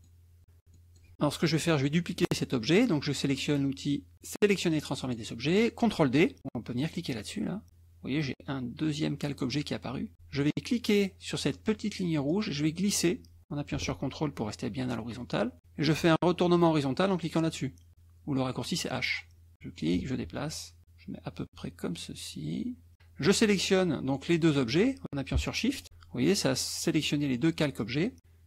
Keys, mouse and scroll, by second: 0.1 middle click, 0.7 click, 1.1 KP_Subtract, 5.1 click, 7.7 click, 12.3-15.6 drag, 19.1 click, 19.5-22.9 drag, 25.8 shift+click.